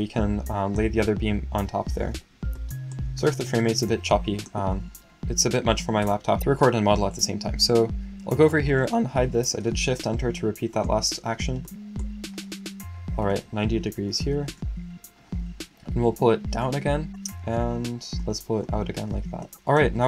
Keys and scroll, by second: 13.7-14.7 typing.